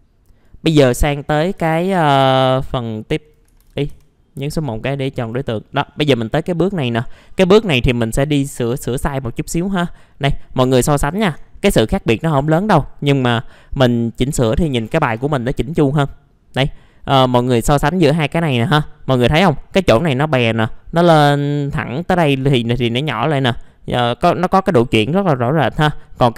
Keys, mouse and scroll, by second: 0.6 scroll down 1, 0.8-2.0 typing, 2.7 click, 3.6 ctrl+z, 3.9 typing, 4.6 click, 5.5 middle click, 5.9-6.7 scroll up 1, 6.7 click, 8.0 middle click, 9.2 scroll up 1, 9.7-10.1 scroll down 1, 10.1 middle click, 11.1 alt+middle click, 11.4-12.0 scroll up 1, 12.2 F4, 12.7 middle click, 15.0 F4, 16.0 middle click, 18.4-19.4 middle drag.